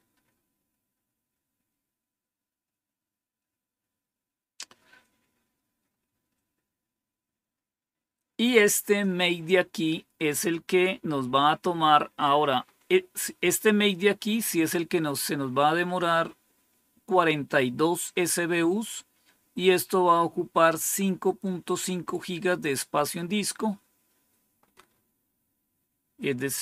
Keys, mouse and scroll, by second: 0.0 Return, 5.8 scroll down 3, 6.4-6.7 scroll down 3, 12.5 scroll up 2, 13.2 scroll down 2, 14.6-15.1 scroll up 3, 15.5-19.6 scroll up 2, 19.6-21.7 drag, 24.0-26.6 scroll down 3.